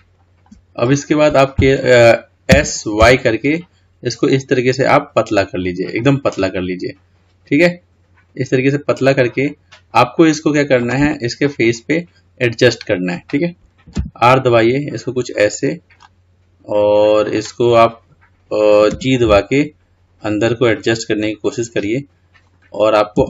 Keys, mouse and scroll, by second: 0.0-1.1 shift+middle drag, 1.1-2.8 scroll up 2, 2.8 s, 6.6-9.6 middle drag, 11.4-12.7 scroll down 2, 12.7-14.3 scroll up 2, 14.3 r, 16.6-19.2 middle drag, 19.2 g.